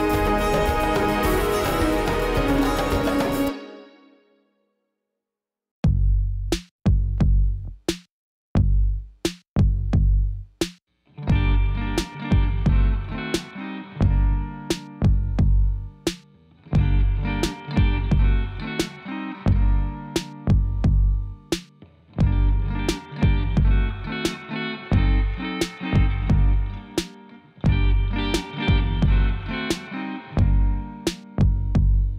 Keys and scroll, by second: 8.6 g, 9.6 r, 11.0 g, 13.8 g, 15.5 e, 19.1 8, 19.3 Return, 20.0 ctrl+r, 20.6 6, 20.8 Return, 21.6 3.